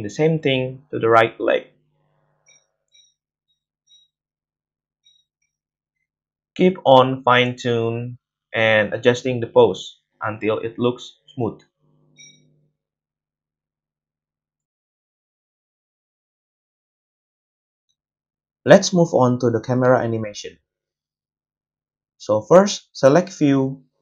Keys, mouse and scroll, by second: 0.9 space, 1.6 space, 3.5 space, 5.6 g, 7.4-8.4 middle drag, 8.4-12.0 drag, 9.8 g, 12.0-13.1 middle drag, 13.0 a, 13.1-17.6 drag, 13.1 space, 17.9 click, 18.1-23.0 drag, 22.2 space.